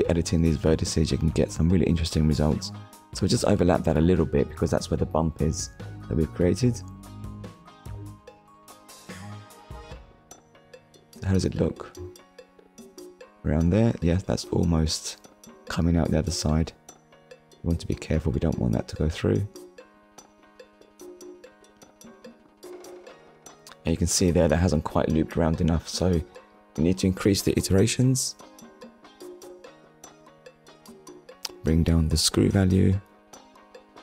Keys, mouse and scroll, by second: 0.1 click, 1.3 click, 7.5 click, 9.5 shift+middle click, 10.7-11.1 scroll down 1, 12.3 click, 15.3 click, 15.6 shift+click, 21.7 click, 22.2 middle click, 26.9 click, 27.9 middle click, 31.4 shift+click.